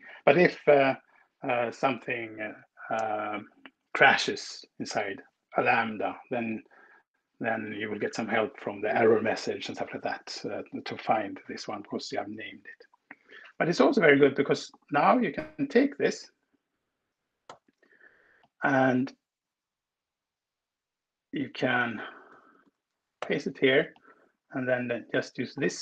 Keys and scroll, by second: 15.8 ctrl+w, 17.1 super+c, 22.5 Return, 23.1 super+v.